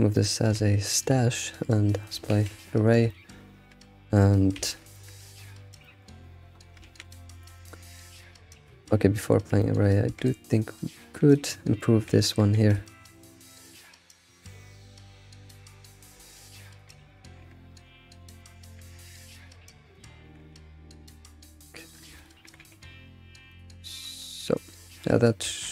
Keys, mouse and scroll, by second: 0.2-2.4 shift+middle drag, 2.4 ctrl+a, 3.1-3.6 shift+middle drag, 3.6 scroll up 3, 4.7 alt+shift+z, 5.0 shift+middle click, 5.2-5.9 scroll up 3, 5.9-6.6 shift+middle drag, 6.6 scroll up 2, 6.8 ctrl+s, 7.3 scroll up 1, 7.5 alt+shift+z, 9.0 ctrl+z, 9.6 shift+middle click, 9.9 scroll up 2, 10.1 Tab, 10.5-10.8 scroll up 2, 11.3 click, 12.1 alt+x, 12.8 shift+click, 13.1 g, 14.1 click, 14.4 g, 15.9 click, 16.3 shift+click, 16.6 shift+click, 17.1 shift+click, 17.4 g, 18.8 g, 19.9 shift+click, 20.2 g, 21.8 click, 22.1 ctrl+click, 22.5 g, 24.9 scroll down 4, 25.4 alt+shift+z.